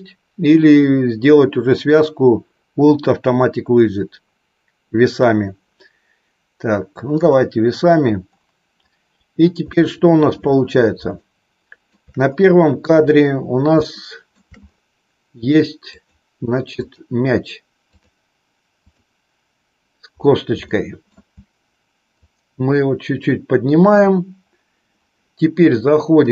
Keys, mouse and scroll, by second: 9.6 shift+middle click, 11.2 shift+middle click, 13.8 shift+middle click, 15.8 click, 17.8-20.6 drag, 20.6 shift+middle click, 22.2-24.0 drag, 26.2-26.3 drag.